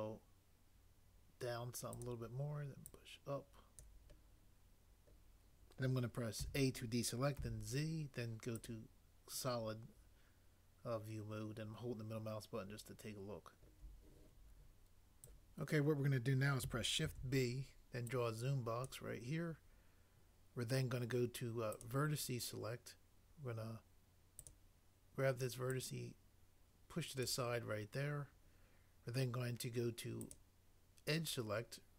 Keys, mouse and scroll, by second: 6.4 a, 7.3 z, 17.1 b.